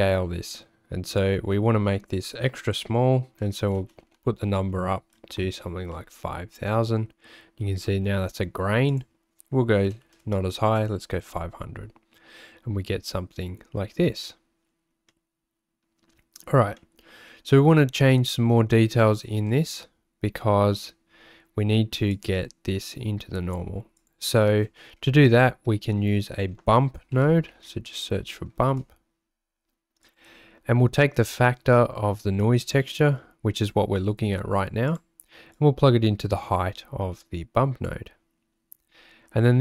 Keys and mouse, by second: 1.1-5.6 drag, 4.0 KP_0, 8.9-10.9 drag, 10.2 KP_0, 15.1-16.4 drag, 16.8 middle click, 22.1-24.0 drag, 25.4 shift+a, 31.3-34.9 drag, 35.7-37.9 drag.